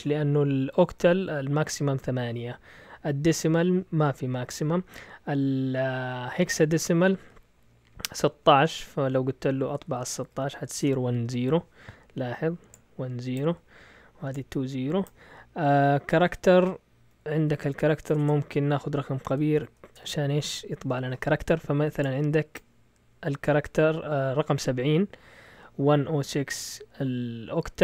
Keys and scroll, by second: 9.9-11.0 typing, 18.1-19.8 typing.